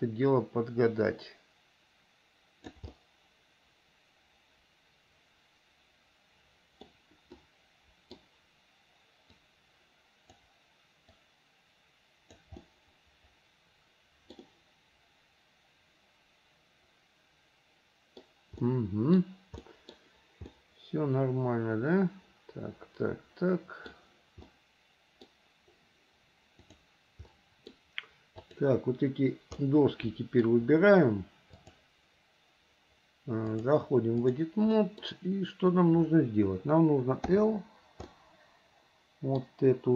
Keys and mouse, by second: 3.1-7.0 middle drag, 7.6 middle click, 9.5-10.6 drag, 11.2 click, 11.5-12.6 drag, 12.8-14.5 middle drag, 14.6-18.4 middle drag, 18.8 middle click, 19.8 middle click, 20.7-24.1 middle drag, 24.6 middle click, 26.9 click, 27.5 middle click, 28.6 click, 29.8 middle click, 31.7-32.9 drag, 33.6-34.6 drag, 35.0 middle click, 37.5 l, 38.4 middle click, 38.9 click.